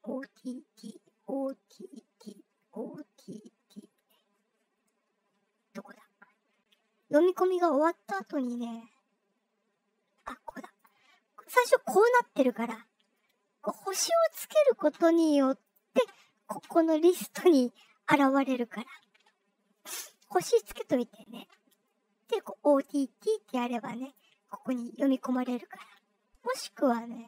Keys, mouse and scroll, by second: 1.1 scroll down 2, 1.1 middle click, 1.1 scroll, 1.9 scroll up 2, 2.5 scroll up 2, 3.8-4.4 scroll down 4, 4.5 middle click, 4.5 scroll, 5.2-6.7 scroll down 10, 7.6-9.0 scroll down 8, 10.7 click, 13.9 click, 15.6 click, 17.2 click, 24.0 click, 26.3 scroll down 1.